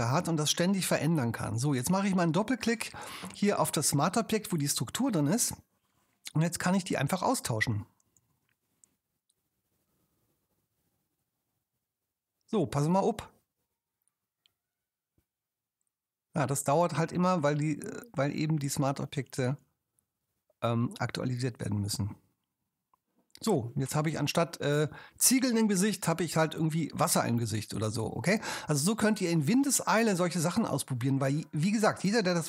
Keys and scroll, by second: 8.2 super+w.